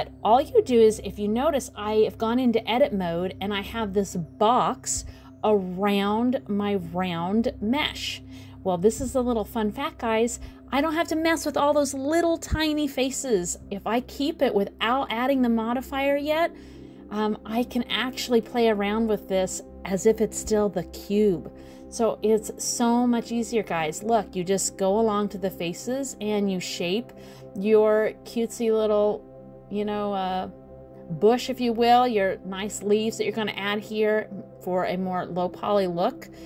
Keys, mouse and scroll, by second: 0.6 click, 0.9 middle click, 2.5 middle click, 5.1 click, 7.5 middle click, 8.5 middle click, 9.2 middle click, 9.9 middle click, 10.4 click, 10.6 middle click, 11.6 click, 12.5 middle click, 13.9 click, 14.4 click, 14.7 middle click, 15.8 click, 17.3 s, 18.8 middle click, 19.7 click, 20.0 middle click, 20.7 click, 22.4 middle click, 23.4 middle click, 24.1 middle click, 24.9 click, 25.1 middle click, 26.0 click, 27.2 click, 28.2 middle click, 28.8 middle click, 29.6 click, 29.9 middle click, 30.5 click, 31.0 middle click, 32.1-32.6 scroll down 1, 33.0 click, 34.2 middle click, 34.9 click, 35.2 middle click, 36.3 click.